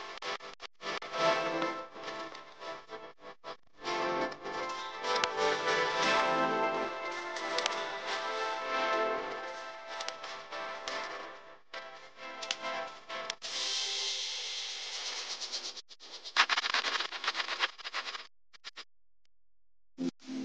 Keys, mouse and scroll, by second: 1.9 right click, 11.2 alt+click, 18.0 shift+click.